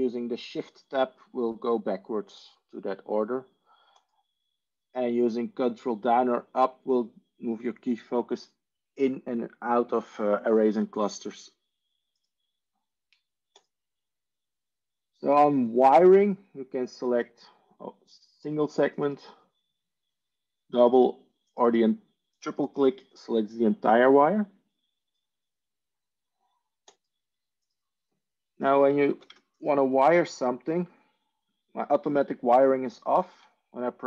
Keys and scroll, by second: 31.7 Tab.